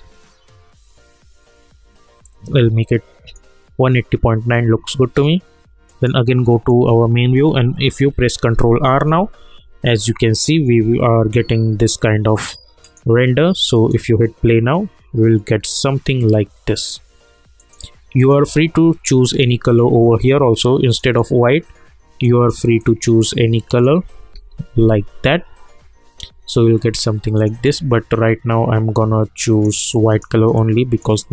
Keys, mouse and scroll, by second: 5.8 middle click, 8.0 ctrl+r, 12.8 click, 17.5 click, 20.9 click, 24.3 ctrl+r, 27.3-31.3 drag.